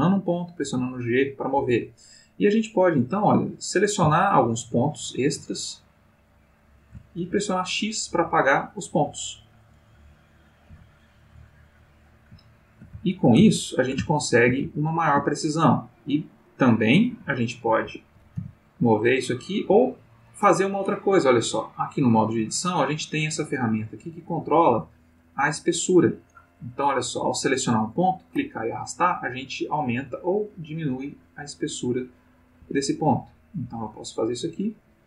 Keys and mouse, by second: 0.3 click, 0.6 g, 1.6 Escape, 2.8 click, 4.4 shift+click, 5.5 shift+click, 6.6 shift+click, 7.3 shift+x, 8.8 click, 9.9 click, 10.7 x, 10.9 click, 12.4 ctrl+middle click, 13.0-15.3 ctrl+shift+middle drag, 15.6 click, 17.1 g, 17.8 Escape, 18.3 g, 19.7 Escape, 25.9 click, 27.3 click, 28.3-32.9 drag, 32.6 Escape, 33.4 click, 33.8-35.0 drag.